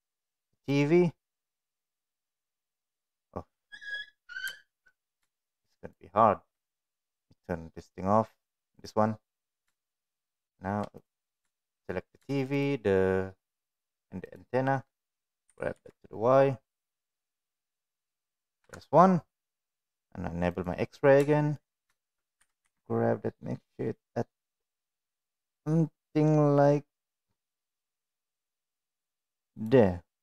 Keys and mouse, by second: 0.7 shift+click, 1.1 shift+click, 2.7 click, 3.5 middle click, 4.5 shift+middle click, 4.7 middle click, 5.5 shift+drag, 8.7 click, 10.0 shift+click, 15.4 g, 18.5 KP_1, 20.5 click, 21.2 shift+middle click, 22.3 g.